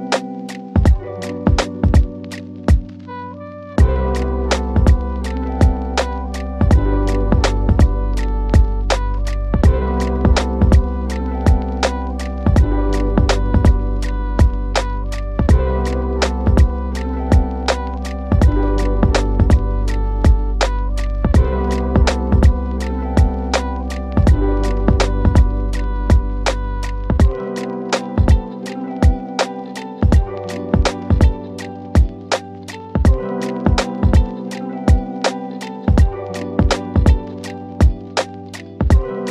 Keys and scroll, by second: 3.0 Delete, 10.1 w, 23.2-24.2 typing, 27.7 ctrl+Page_Down, 33.4 ctrl+Page_Down, 37.8 shift+F2.